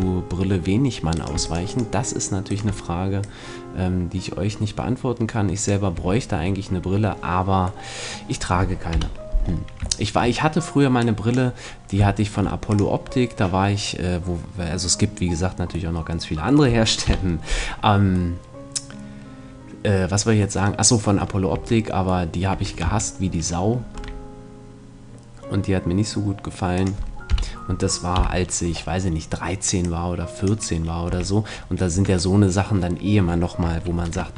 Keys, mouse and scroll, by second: 1.2-4.4 right drag, 3.2-5.1 drag, 6.0 a, 6.1-8.9 middle drag, 8.9 KP_1, 11.0 click, 13.5 click, 16.0 middle click, 17.0 KP_1, 21.5 Tab, 22.5 Tab, 22.8 a, 24.0 e, 27.1-28.7 drag, 27.3 KP_1, 28.2 KP_3, 28.6-31.5 middle drag, 29.8-31.5 drag, 31.0 a, 31.9 Tab, 34.0 ctrl+2.